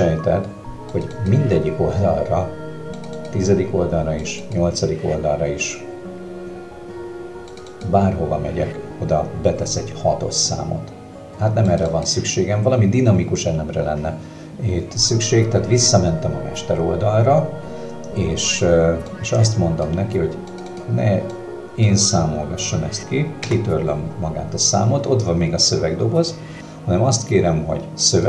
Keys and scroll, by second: 23.4 BackSpace.